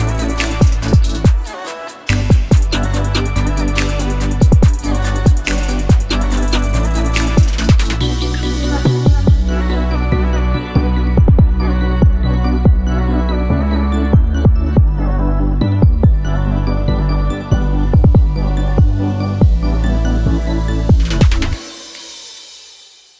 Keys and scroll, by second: 0.6 Return, 3.7-4.7 typing, 5.1 shift+Return, 5.9 Return.